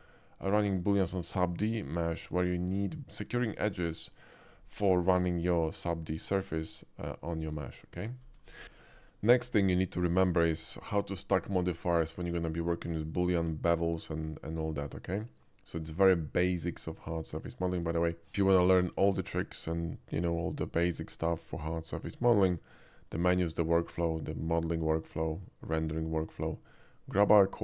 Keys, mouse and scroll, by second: 8.4 middle click, 8.9 shift+middle drag, 15.6 shift+middle click.